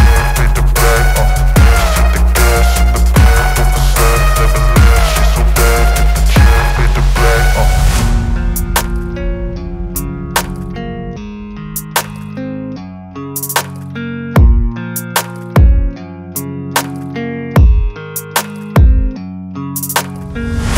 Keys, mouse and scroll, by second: 3.9 click, 4.8 right click, 5.6 click, 7.0-7.8 alt+scroll up 2, 8.1 space, 8.2-8.9 click, 8.6 space, 9.4-10.4 click, 9.9 space, 10.4 space, 10.6-11.3 click, 11.0 space, 12.3-13.0 click, 12.8 space, 13.0 click, 18.0 click, 19.6 right click.